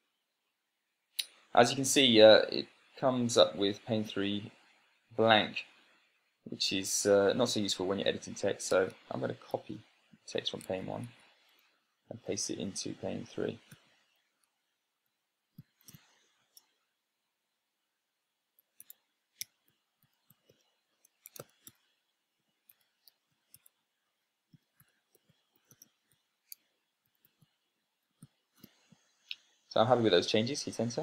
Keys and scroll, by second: 0.3 Tab, 9.5 Tab, 10.2 super+c, 11.2 Tab, 11.5 Tab, 12.8 super+v, 14.8 Right, 16.1 BackSpace, 19.2-29.4 typing.